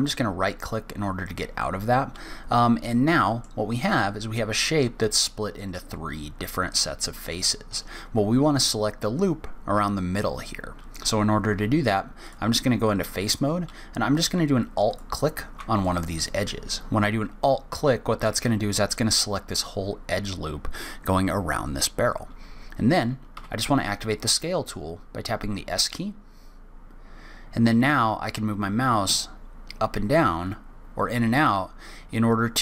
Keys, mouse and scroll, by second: 2.9 middle click, 12.2 click, 14.9 alt+click, 15.8 middle click, 18.5-21.5 scroll up 2.